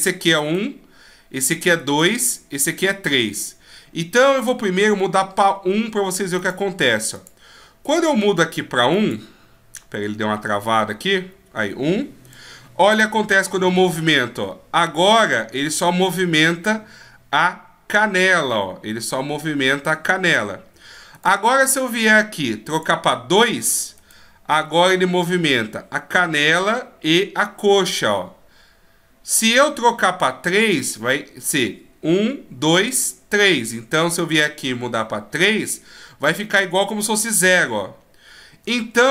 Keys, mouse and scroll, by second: 0.4 right click, 11.0 click, 12.3 right click, 12.9 g, 21.2 right click, 22.7 click, 24.0 right click, 24.7 g, 34.1 right click, 35.4 click, 36.2 right click, 37.0 g.